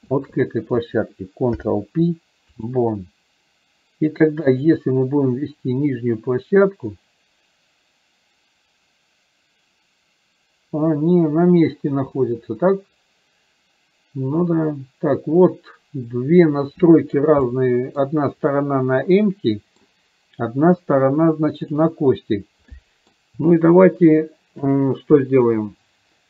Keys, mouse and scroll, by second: 0.3 shift+click, 5.9-17.2 drag, 17.5-18.0 middle drag, 19.3-20.0 middle drag, 22.9 middle click.